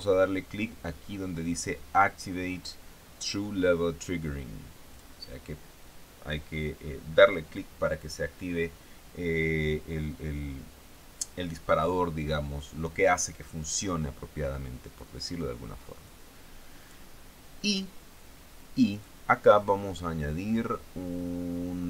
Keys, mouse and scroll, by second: 5.4 click, 16.5 click, 19.4 click.